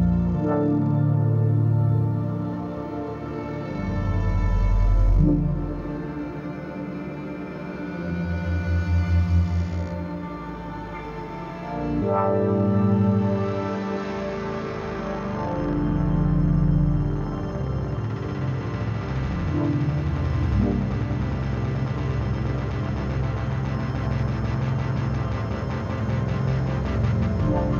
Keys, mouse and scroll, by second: 11.3 shift+Num_Lock, 11.4 shift+Right, 13.7 click, 15.0 shift+click, 15.9 shift+click, 16.4 ctrl+g, 17.1-18.4 drag, 22.5 click, 23.9-27.7 drag.